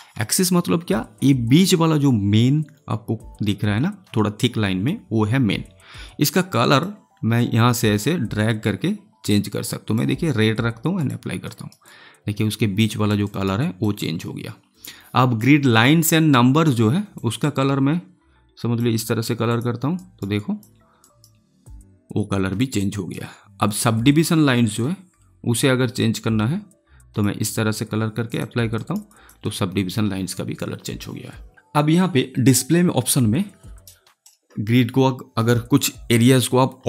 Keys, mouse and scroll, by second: 0.1 alt+middle click, 11.4 alt+right click, 12.1 alt+click, 13.2 alt+right click, 17.1-19.4 drag, 19.9 alt+right click, 20.1 alt+right click, 20.3 alt+click, 20.9 alt+right click, 22.5 alt+click, 22.9 alt+right click, 24.7-28.2 drag, 28.7 alt+right click, 29.0 alt+click.